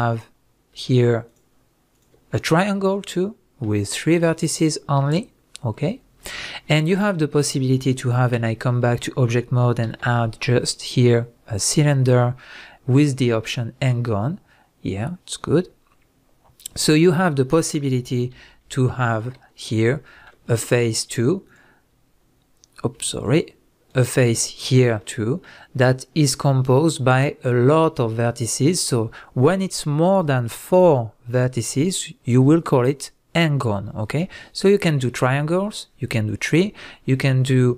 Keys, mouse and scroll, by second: 0.1 click, 0.4-1.3 scroll up 1, 1.3 shift+click, 1.9 shift+drag, 2.3-12.9 middle drag, 6.0-6.7 scroll down 2, 8.3 Tab, 8.8-9.8 scroll down 2, 9.8 shift+a, 13.4 click, 17.9 g, 19.2 click, 19.3 Tab, 19.6 scroll up 1, 20.1-20.7 shift+middle drag, 20.7 click, 21.5 click, 23.3 click, 23.9 alt+click, 25.0-37.7 middle drag.